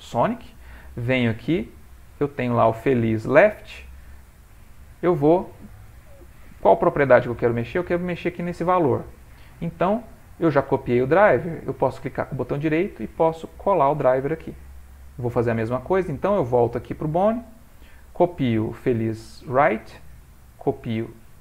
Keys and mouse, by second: 1.1 click, 1.9 middle click, 4.1 click, 7.6 click, 12.2 right click, 16.4 click, 19.1 right click.